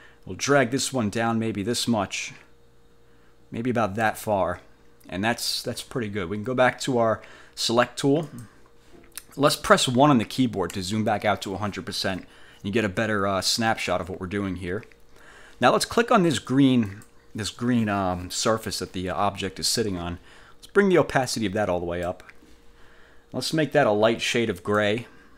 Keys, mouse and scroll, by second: 8.4 click, 10.8 1, 17.0 click, 21.2 click, 24.7 click.